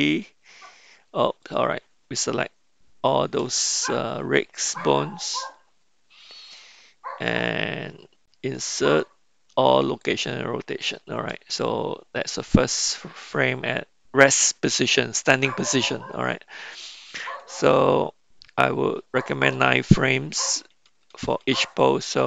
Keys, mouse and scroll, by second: 0.1 i, 3.5 a, 8.6 i, 19.6 Right, 20.5 Right, 20.7 Right, 21.0 Right, 21.2 Right, 21.5 Right.